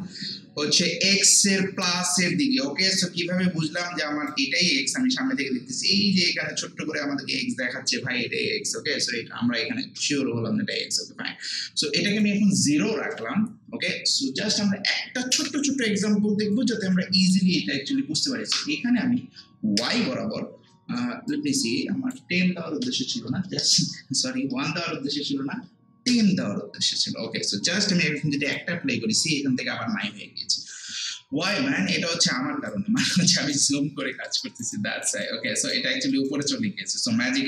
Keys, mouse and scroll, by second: 3.6 alt+middle click, 3.8-6.7 drag, 11.8 click, 13.0 0, 15.3 Return, 16.5-18.5 drag, 18.5 1, 19.8 Return, 21.3-22.7 drag, 22.7-23.8 typing, 26.1 Return, 28.4 Return, 28.5 click, 31.9 scroll down 1, 32.7 alt+click, 33.2 alt+right click, 34.0 alt+middle click, 34.4 alt+right click, 34.7 alt+click, 35.2 alt+right click, 35.9 alt+middle click.